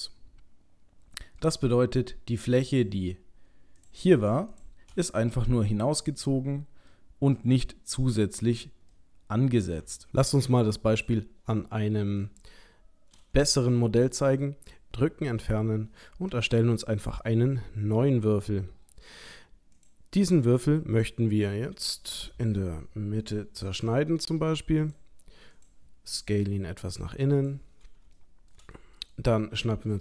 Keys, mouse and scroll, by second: 2.7 click, 3.8 click, 4.5 shift+click, 4.9 shift+click, 5.2 middle click, 6.9 middle click, 9.8 middle click, 10.0 ctrl+middle click, 10.1 click, 10.7 middle click, 11.1 middle click, 13.5 Tab, 14.8 Delete, 16.5 shift+a, 20.5 middle click, 22.2 Tab, 23.8 ctrl+r, 26.5 s, 28.2 shift+middle click, 28.6 shift+middle click, 28.8 middle click.